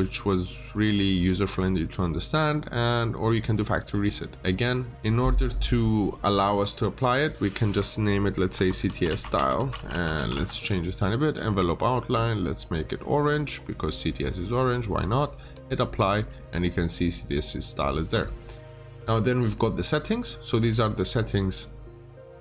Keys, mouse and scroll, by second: 4.6-4.9 scroll up 1, 4.9 click, 8.5-10.7 typing, 11.5 click.